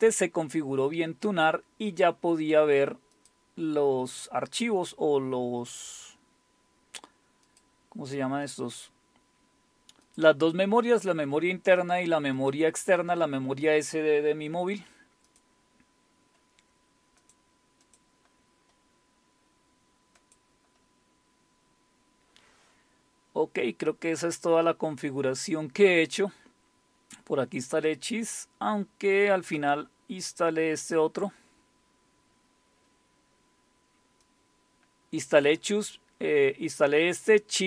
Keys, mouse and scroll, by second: 0.0 click, 3.2 click, 7.5 click, 8.1 click, 8.5 click, 10.0 click, 12.4 click, 15.3 click, 17.2-18.7 drag, 20.2 click, 21.5-22.8 scroll down 1, 22.8-23.5 scroll down 1, 23.5-24.7 scroll down 2, 24.7-26.6 scroll down 1, 28.4-29.6 scroll down 2, 29.6-31.0 drag, 31.6 click, 32.0-33.0 scroll down 1, 34.2-36.0 drag.